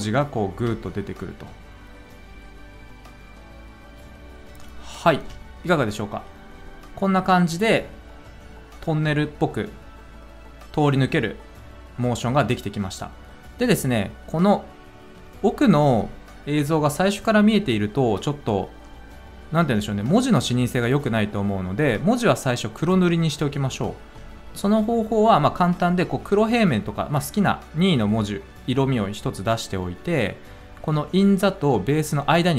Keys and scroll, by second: 0.5 space, 5.1 space.